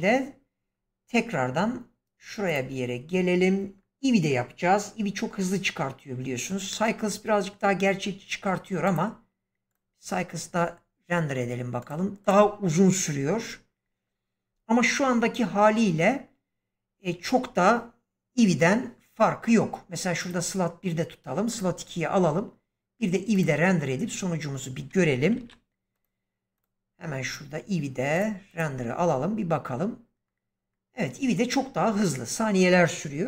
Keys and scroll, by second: 25.2 ctrl+s.